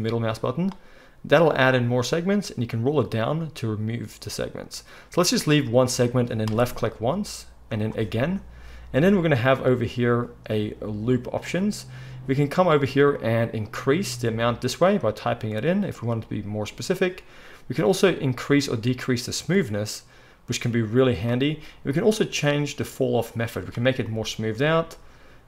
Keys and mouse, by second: 7.8-21.8 drag, 13.1-14.5 middle drag, 13.1-14.5 right drag, 21.2 middle click, 21.2 right click, 22.7-23.6 drag, 22.7-23.6 middle drag, 22.7-23.6 right drag.